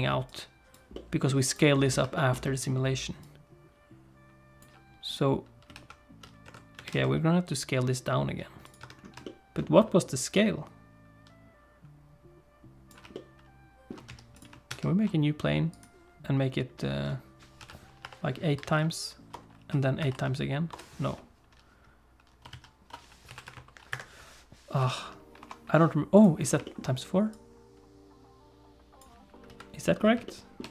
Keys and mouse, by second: 0.3 click, 0.9 middle click, 1.5 click, 2.1 shift+middle click, 2.4 middle click, 3.2-4.6 drag, 5.7 alt+s, 6.4 Tab, 6.7 a, 6.9 s, 8.8 Tab, 9.2 shift+click, 10.3-12.9 drag, 13.1 shift+middle click, 14.0 x, 14.6 shift+a, 17.5 s, 19.5 s, 22.6 ctrl+z, 23.2 s, 24.8 s, 26.6 shift+middle click, 27.3-29.0 drag, 29.4 KP_3, 30.2 shift+middle click.